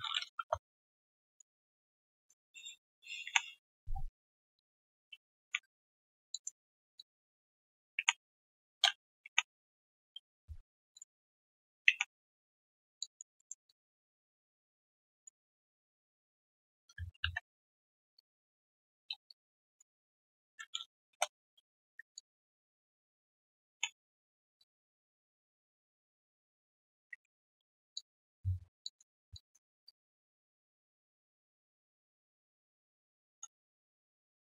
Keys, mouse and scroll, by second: 0.3 alt+click, 1.1 alt+click, 1.6 right click, 3.2 ctrl+Delete, 5.4 ctrl+Delete, 6.3 alt+click, 6.9 ctrl+click, 7.8 ctrl+click, 7.9 ctrl+Delete, 9.2 ctrl+Delete, 11.8 ctrl+Delete, 13.0 alt+click, 13.3 alt+middle click, 13.6 alt+click, 15.4 alt+right click, 16.9 alt+right click, 19.2 shift+click, 21.0 shift+click, 22.1 alt+click, 22.5 ctrl+z, 23.2 alt+click, 23.7 ctrl+Delete, 24.5 alt+click, 24.9 alt+right click, 25.1 alt+middle click, 25.5 right click, 26.2 double click, 27.1 ctrl+Delete, 27.9 alt+click, 28.4 q, 28.8 alt+click, 29.0 alt+right click, 29.3 alt+click, 29.8 right click, 30.7 right click, 33.7-34.4 typing.